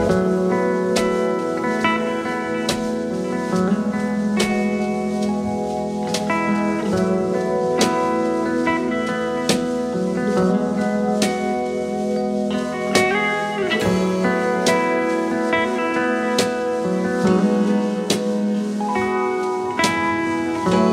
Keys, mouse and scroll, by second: 0.1 ctrl+z, 2.1 ctrl+t, 3.7 ctrl+a, 4.1 Return, 4.1 0, 6.3 shift+click, 6.6 alt+click, 7.5 double click, 8.0 alt+scroll down 1, 8.2 space, 10.9 typing, 12.7-13.7 typing, 15.0 ctrl+t, 15.8 ctrl+t, 18.4 alt+scroll up 1, 19.1-19.7 space.